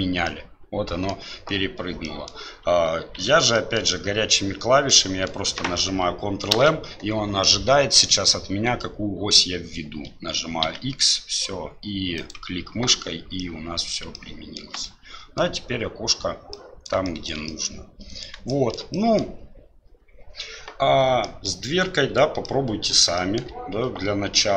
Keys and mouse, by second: 0.3-1.2 middle drag, 2.0 middle click, 3.2 ctrl+z, 3.5 drag, 4.9 click, 6.5 ctrl+m, 13.5 click, 14.2-14.6 shift+middle drag, 14.8-15.5 middle drag, 16.6 middle click, 17.1 shift+middle drag, 17.5-18.3 middle drag, 18.6 shift+middle click, 19.1 middle click, 21.4 middle click, 22.4-23.0 middle drag, 23.2 shift+middle drag.